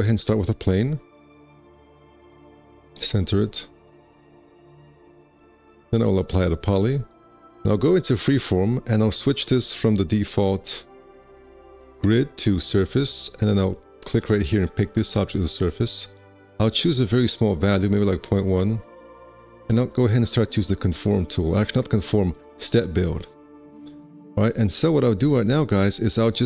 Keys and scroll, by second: 2.4 w, 5.6 `, 6.2 1, 19.0 KP_Decimal, 19.0 KP_1.